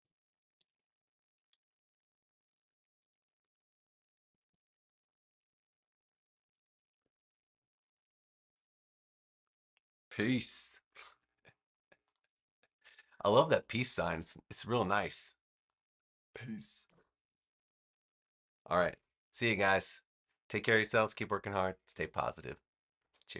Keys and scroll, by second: 0.0-7.0 typing, 12.6-14.2 typing, 16.8 Return.